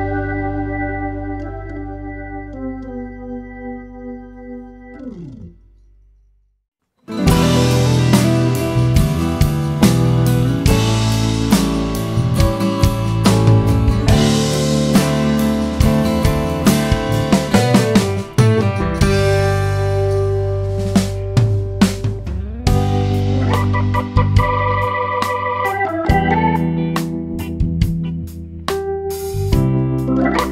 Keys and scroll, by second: 0.1 BackSpace, 4.9 BackSpace, 12.4 space, 21.1 space.